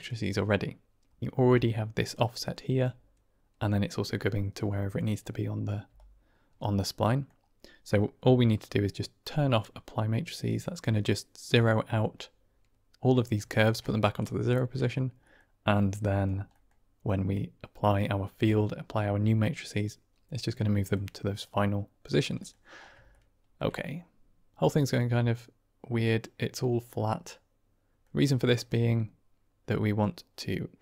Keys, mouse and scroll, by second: 1.3 d, 1.4 click, 2.0 d, 2.1 click, 2.1 d, 2.7 d, 5.8 d, 5.8 right click, 6.9 middle click, 13.5 shift+middle click, 15.2 middle click, 15.6 click, 16.5 middle click, 17.1 click, 20.8 middle click, 21.5 click, 23.0 shift+middle drag, 23.2 shift+drag, 23.7-24.5 middle drag, 24.9-27.9 middle drag, 29.9-30.8 drag.